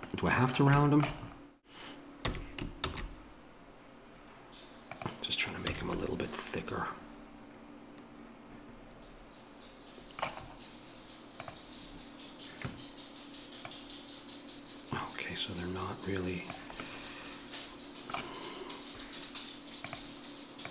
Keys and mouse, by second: 5.6 a, 11.4-16.4 drag.